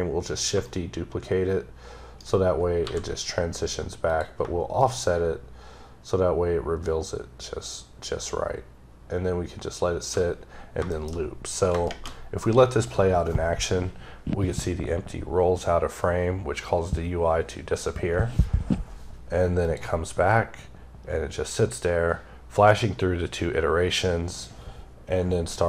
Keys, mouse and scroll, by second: 0.5 right click, 3.9 click, 4.6 shift+right click, 10.3-11.0 scroll up 4, 10.8 middle click, 11.0 scroll, 11.1 scroll up 2, 11.4 scroll down 2, 19.5 click.